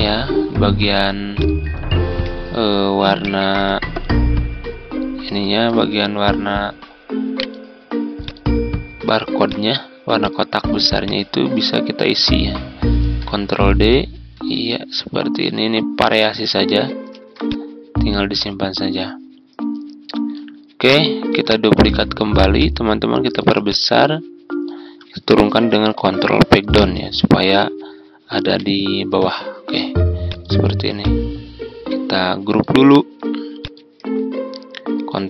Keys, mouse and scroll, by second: 1.9-3.2 ctrl+scroll up 1, 3.2-5.6 drag, 7.3 right click, 8.1 click, 12.9 ctrl+d, 13.5-16.8 drag, 17.0 ctrl+d, 17.4-20.8 drag, 20.8 click, 21.6 ctrl+d, 22.5-24.8 ctrl+shift+drag, 25.9 ctrl+Page_Down, 26.1 ctrl+Page_Down, 26.3 ctrl+Page_Down, 28.4 Page_Up, 30.2-32.8 drag, 35.1 ctrl+g.